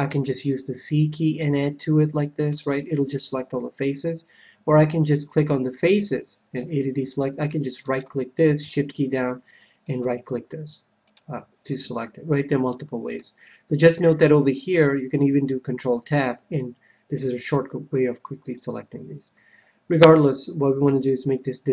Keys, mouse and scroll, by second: 0.0 right click, 0.0 c, 3.0-5.0 right drag, 5.7-7.4 drag, 6.6 a, 7.8-9.5 right drag, 9.8-12.5 right drag, 11.6-13.2 middle drag, 15.7 ctrl+Tab, 20.9-21.7 drag.